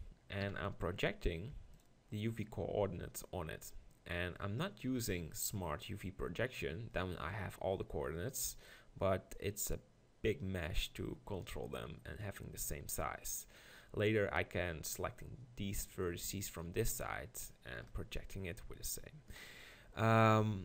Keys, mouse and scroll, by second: 0.4 u, 17.8 KP_1, 20.0 t, 20.5 n.